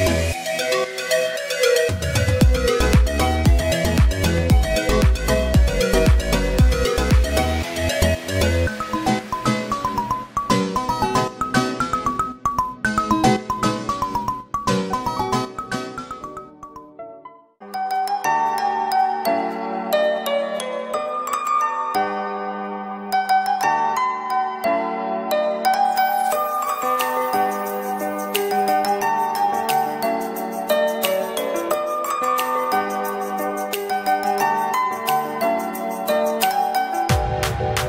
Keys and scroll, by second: 2.5 space, 4.0 [, 9.4 Down.